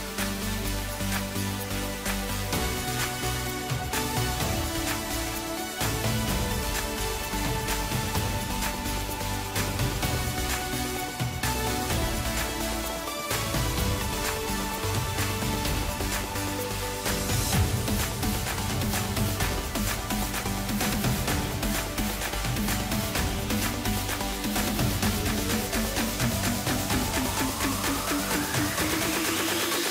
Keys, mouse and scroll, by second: 0.7-1.0 scroll down 3, 1.0-2.4 middle drag, 2.4-3.3 ctrl+KP_8, 4.3-5.0 scroll up 1, 5.0-7.3 middle drag, 7.3 ctrl+alt+KP_0, 10.0 click, 11.0 g, 12.2 scroll up 4, 13.0-13.4 scroll down 3, 13.4 middle click, 14.3-15.0 scroll down 2, 15.0 KP_0, 16.3 click, 16.8-18.1 scroll down 8, 18.1 drag, 18.4-18.8 scroll down 1, 19.4 click, 20.2-20.6 scroll up 3, 20.6-21.2 scroll down 3, 21.5-24.6 drag, 27.2 scroll up 3, 27.9-28.5 scroll down 3, 28.5-29.5 middle drag, 29.5-29.9 scroll down 1.